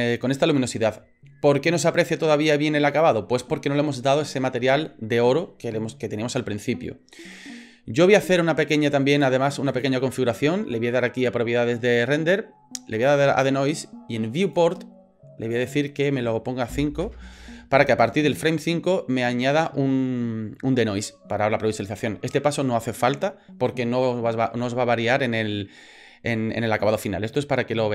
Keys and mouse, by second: 8.2 click, 9.7 click, 12.9 click, 14.4 click, 15.5-17.4 drag.